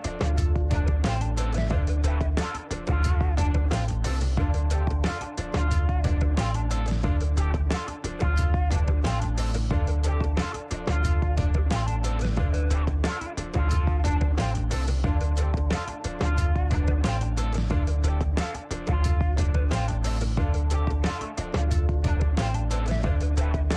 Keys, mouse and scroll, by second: 0.1 click, 1.1 click, 1.8 scroll up 1, 3.3 click, 4.4 click, 5.1 right click, 7.0 click, 8.9 click, 9.9 click, 11.3 click, 13.0 click, 13.6 right click, 14.4 right click, 14.8 click, 16.2 click, 16.8 scroll up 1, 17.5 click, 18.1 click, 19.5 click, 20.6 click, 23.0 click.